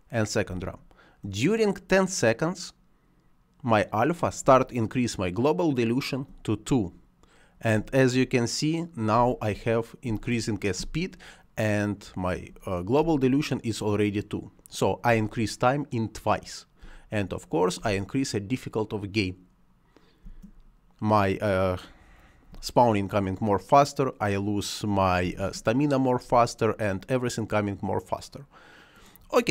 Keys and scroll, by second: 0.4 space, 4.3 space, 7.6 space, 15.0 space, 16.7 space, 20.1 space, 22.4 space, 25.1 space.